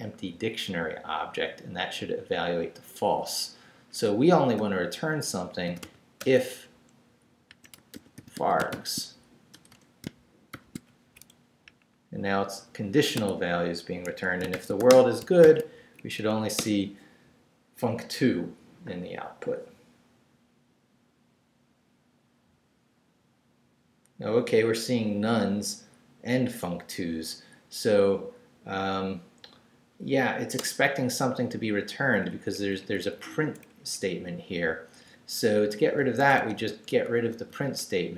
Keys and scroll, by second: 4.6-10.5 typing, 11.0 shift+Down, 11.3 Left, 13.1 Tab, 14.0 Escape, 14.5 shift+;, 14.8 shift+w, 14.9 Return, 15.4 shift+;, 16.0 shift+Up, 16.6 Return, 30.6 Return, 32.0 Up, 33.1 Right, 33.8 Up, 34.0 Right, 36.0 x, 37.7 Right.